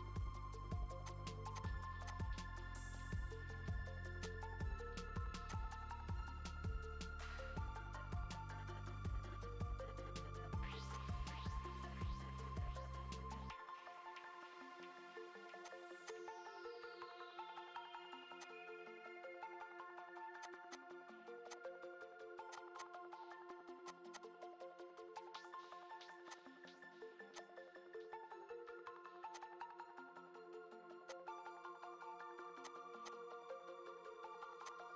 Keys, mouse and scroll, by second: 1.0 click, 1.5 click, 2.6 e, 4.6 Return, 5.0-5.7 scroll down 7, 5.4 click, 5.7-6.0 scroll up 2, 6.8 Return, 8.0 scroll down 4, 8.2-9.6 scroll up 8, 9.6-10.0 scroll down 10, 10.2-10.8 scroll up 13, 10.9 click, 12.2 ctrl+shift+b, 16.0 click, 16.8 ctrl+shift+b, 18.6-19.9 scroll down 12, 19.4-20.4 scroll up 9, 20.4 click, 20.7 click, 21.5 click, 21.8 scroll down 4, 22.0 scroll up 2, 22.5 click, 22.8 click, 23.8 click, 24.1 click, 26.3 click, 26.4-27.0 scroll down 7, 27.0-27.3 scroll up 7, 27.3 click, 27.8 ctrl+shift+b, 29.7-30.2 scroll down 7, 30.2-31.3 scroll up 13, 31.0 click, 31.7 ctrl+shift+b, 33.0 click, 33.4 ctrl+shift+b, 34.8 scroll down 2.